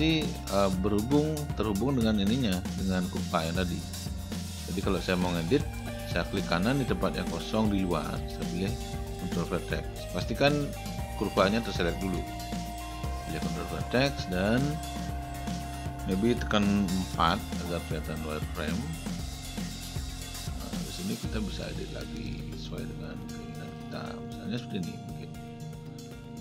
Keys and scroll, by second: 17.2 4.